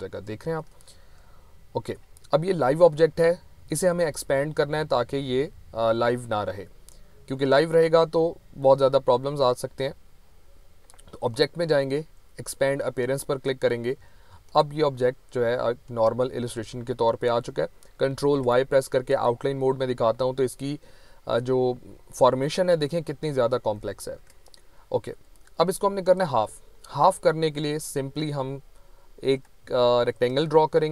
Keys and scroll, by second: 0.7 ctrl+=, 18.2 ctrl+y, 24.1 ctrl+y.